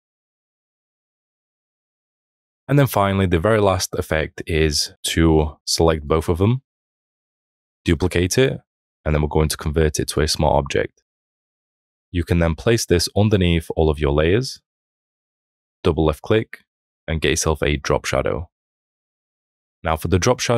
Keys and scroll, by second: 7.7 ctrl+j.